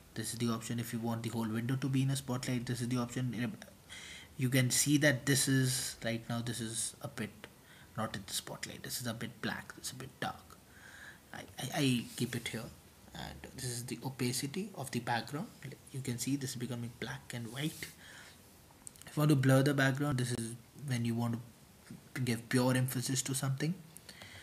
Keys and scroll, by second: 2.7-3.6 typing, 3.7 super+t, 5.4-6.2 typing, 9.3-10.1 typing, 18.5-19.2 typing.